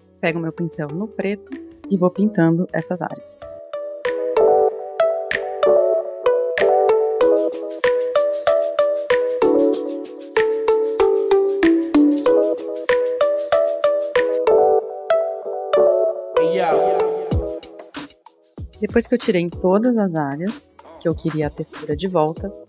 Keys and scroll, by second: 1.2 super+=, 1.2 typing, 1.6 super+=, 2.0 super+=, 2.5-3.3 typing, 4.4-15.5 typing, 10.2 super+z, 11.0 super+-, 14.6 super+=, 16.4 super+0, 16.6-17.6 typing, 19.0 super+=, 19.2 super+=, 19.6-19.9 typing.